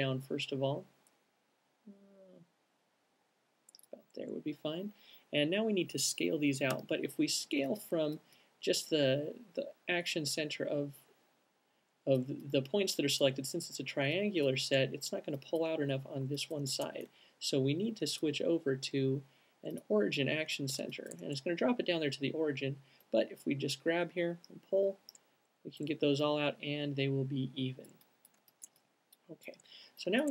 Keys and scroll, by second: 7.0 r, 7.7 alt+r, 17.4 alt+super+z.